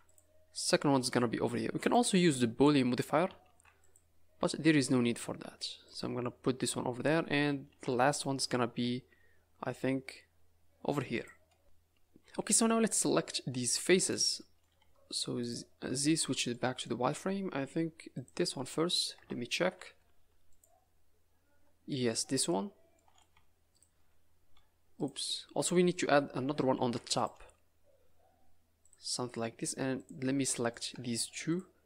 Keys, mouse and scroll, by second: 3.4 ctrl+r, 6.8 scroll down 1, 7.1 scroll up 3, 7.6 ctrl+r, 12.5 middle click, 14.0 click, 14.3 middle click, 14.8 z, 16.1 scroll up 4, 16.5 middle click, 17.0-17.9 scroll down 3, 18.1 click, 19.1 KP_0, 19.9 z, 21.8 scroll up 3, 22.0 middle click, 22.3 middle click, 22.7 scroll up 2, 22.9 middle click, 23.3 z, 23.7 click, 24.5 z, 25.3 scroll down 5, 25.7 middle click, 26.1 scroll up 2, 26.7 ctrl+r, 29.9 click, 30.3-30.7 scroll up 3, 30.7 click, 31.4 shift+click.